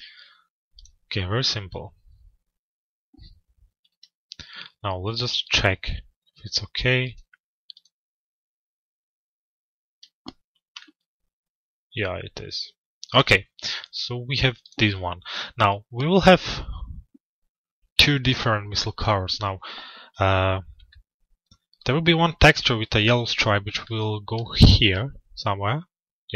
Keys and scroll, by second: 3.4 F4.